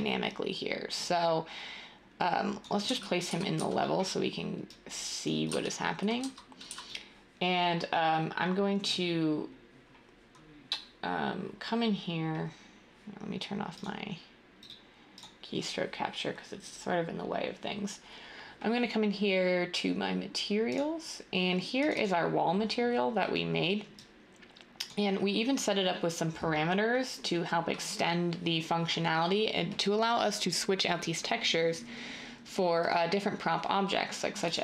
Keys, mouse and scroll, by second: 2.8-3.6 typing, 5.4 a, 6.2 a, 6.6 s, 8.2-8.9 typing.